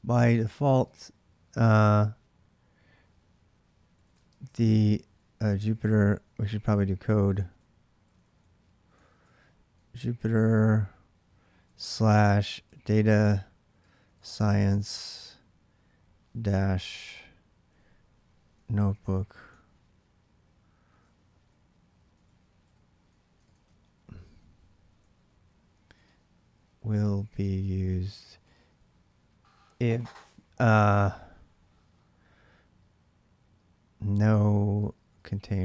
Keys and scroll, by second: 0.0-1.3 typing, 3.4-14.7 typing, 15.9 typing, 17.2-19.3 typing, 20.8-28.2 typing, 33.6-35.6 typing.